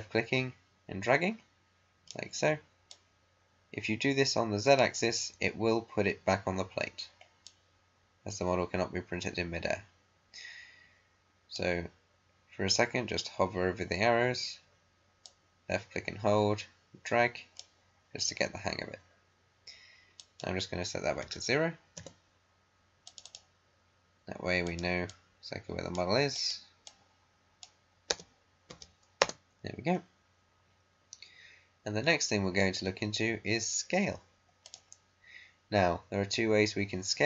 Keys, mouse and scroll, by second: 7.4-14.2 drag, 15.2-20.0 drag, 20.1 click, 21.2 0, 21.9 Return, 23.0-28.0 drag, 28.0 BackSpace, 28.6 0, 29.1 Return, 34.6 click.